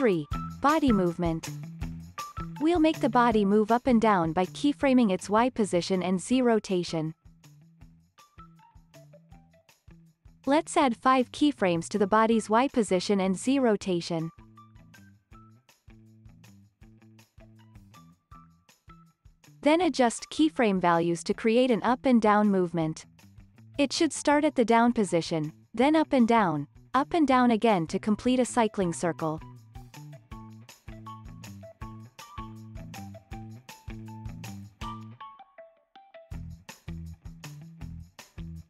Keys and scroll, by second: 9.2 super+z, 27.3 super+c, 28.2 super+v, 37.4 super+c.